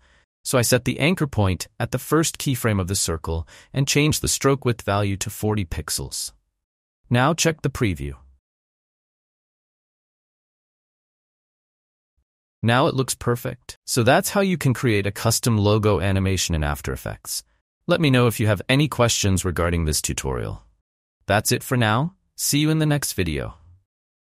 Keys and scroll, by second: 5.0 4, 5.7 Return, 6.5 space.